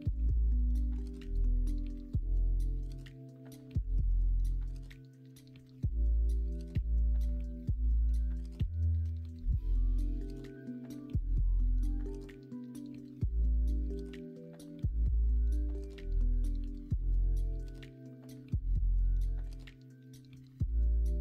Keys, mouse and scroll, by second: 0.1 s, 2.0 middle click, 2.5 click, 3.4 KP_1, 3.7 KP_3, 4.1 alt+z, 5.8 shift+middle click, 6.8 shift+middle click, 8.0 ctrl+r, 9.3 middle click, 10.4 middle click, 11.0 middle click, 13.0 alt+z.